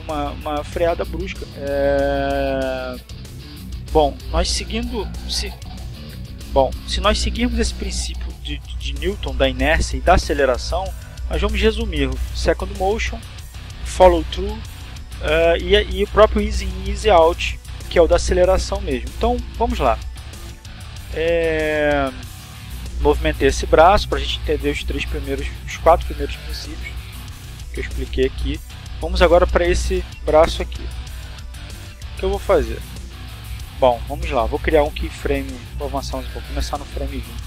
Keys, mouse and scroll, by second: 14.2-16.2 drag, 19.1 click, 23.7 shift+right click, 26.0 shift+right click, 29.2 click, 31.9 i, 35.2 click.